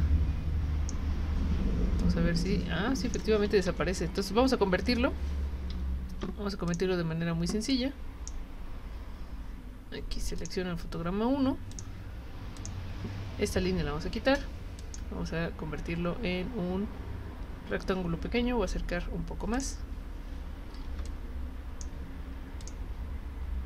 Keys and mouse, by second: 2.0-3.1 drag, 6.7 click, 7.7 click, 10.4 click, 11.7 click, 12.6 click, 13.8 Delete, 14.8 click, 19.5 click, 21.1 click, 22.6 click.